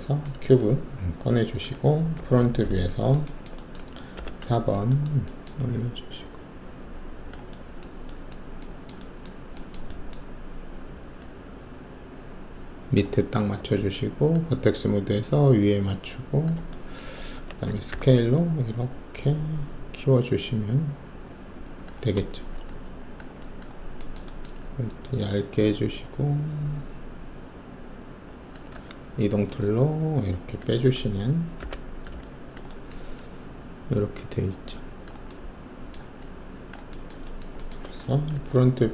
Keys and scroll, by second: 2.1 alt+shift+3, 4.1 alt+4, 13.5 alt+1, 17.1 alt+`, 17.9 r, 22.3 alt+shift+q, 28.7 w, 31.5 5, 38.3 alt+shift+3.